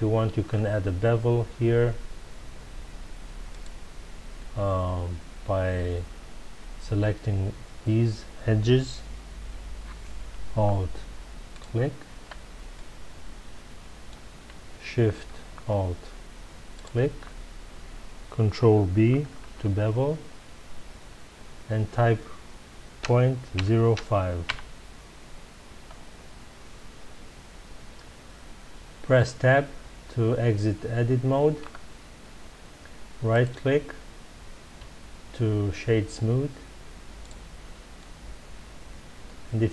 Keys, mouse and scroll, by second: 0.5-3.0 scroll up 2, 3.5 click, 11.5 alt+click, 12.7-15.7 middle drag, 16.7 alt+shift+click, 19.4 ctrl+b, 24.5 KP_Enter, 25.9 scroll down 1, 26.7-29.7 middle drag, 31.6 Tab, 33.3-37.2 right drag, 37.9-39.7 middle drag.